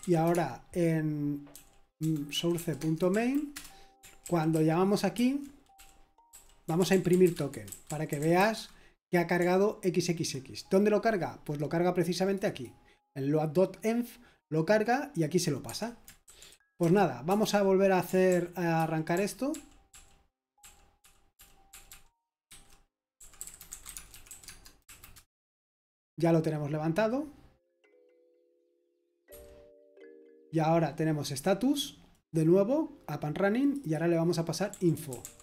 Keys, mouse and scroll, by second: 0.0-8.3 typing, 4.2 ctrl+d, 8.5 Escape, 16.2-17.3 typing, 18.3 ctrl+p, 18.8 ctrl+p, 19.1 ctrl+p, 19.5-21.9 ctrl+p, 22.5 ctrl+c, 22.9-24.7 typing, 24.8 Right, 25.1 Return, 29.3 super+8, 32.3-35.2 drag, 35.2 typing.